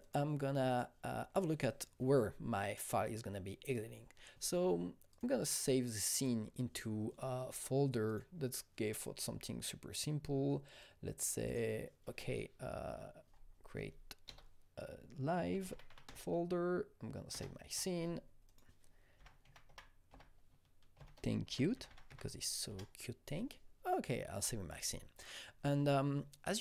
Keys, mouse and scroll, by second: 0.0 click, 0.7 click, 5.1 click, 6.1 click, 8.0 click, 11.4 click, 14.2-16.3 typing, 15.8 click, 17.3 Return, 18.4 click, 18.9-22.5 typing, 22.6 Return.